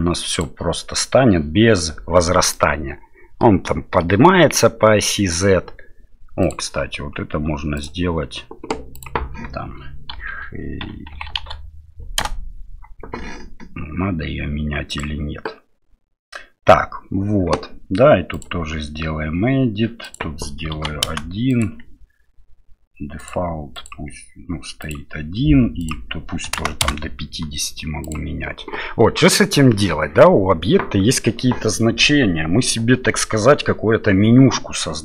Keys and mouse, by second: 0.4 click, 2.5 middle click, 6.4 click, 7.9-15.0 drag, 18.4-28.1 drag.